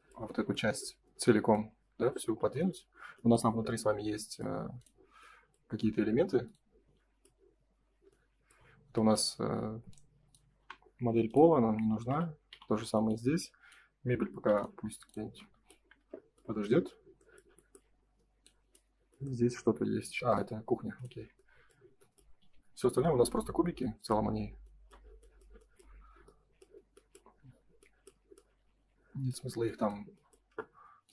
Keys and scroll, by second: 2.2 F3, 10.5 Delete, 12.4 Delete, 15.2 space, 15.9 F3, 21.1 space, 22.4 F4.